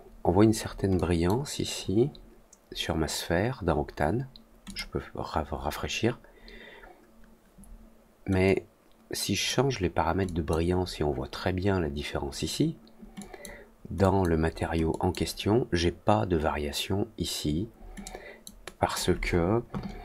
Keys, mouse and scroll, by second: 0.9 click, 4.6 click, 8.4-9.4 drag, 10.2 click, 13.1 click, 13.9 click, 14.8 click, 18.0 click, 18.6 click.